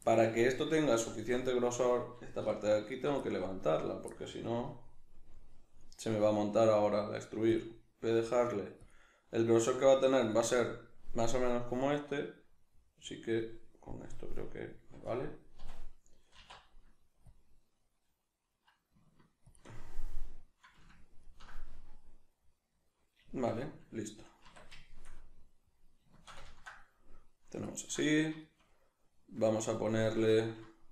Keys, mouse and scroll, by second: 0.1-2.9 ctrl+middle drag, 2.5 3, 2.9 alt+right click, 3.2-7.6 middle drag, 6.8 g, 7.6 click, 7.6-8.9 middle drag, 8.2 g, 8.9 click, 9.0-10.3 middle drag, 9.6 g, 10.3 click, 11.4-19.6 middle drag, 15.6 a, 16.4 alt+e, 19.6 shift+click, 19.7-30.9 middle drag, 24.5 Tab.